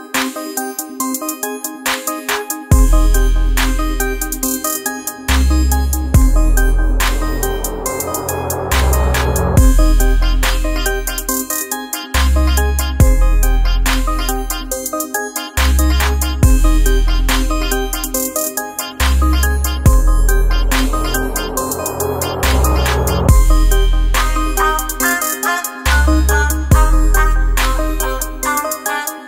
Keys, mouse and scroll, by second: 0.4 click, 9.5-17.0 drag, 17.0 F7, 19.3 click, 21.6-27.1 alt+drag, 27.1-29.2 alt+drag.